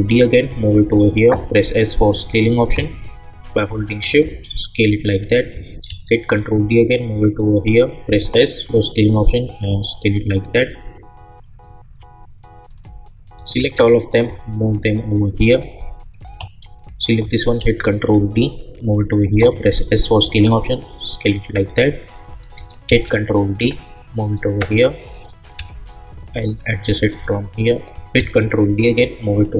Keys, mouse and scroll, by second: 0.2-1.1 drag, 1.3 s, 2.1-4.5 drag, 4.5-5.8 drag, 5.8 ctrl+d, 6.3-8.1 drag, 8.1 s, 9.0-11.6 drag, 13.5 ctrl+a, 14.2 click, 14.2-15.9 drag, 17.6 ctrl+d, 18.1 click, 19.4 s, 20.2-22.8 drag, 22.8 ctrl+d, 23.6-27.5 drag, 27.5 click, 28.1 ctrl+d, 28.6-29.5 drag.